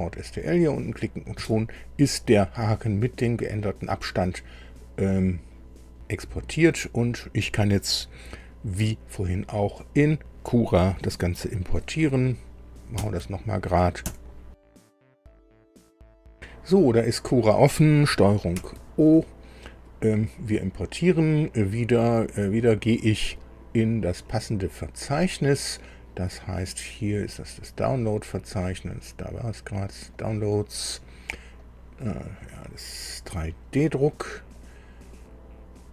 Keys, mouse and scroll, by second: 0.2 click, 6.2 scroll down 1, 12.9 ctrl+alt+b, 14.0 KP_7, 26.4-26.8 scroll down 2, 27.0-28.0 scroll down 5, 28.4 scroll up 2, 29.9 click.